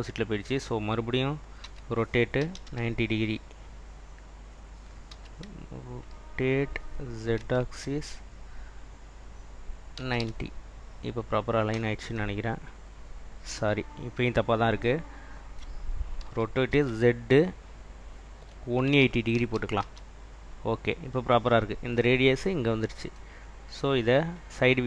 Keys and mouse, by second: 1.7 r, 2.4 9, 2.7 0, 4.1 click, 5.2 r, 7.4 z, 10.1 9, 10.3 0, 10.7 click, 16.3 r, 16.8 z, 19.0 1, 19.5 8, 19.9 0, 24.3 click.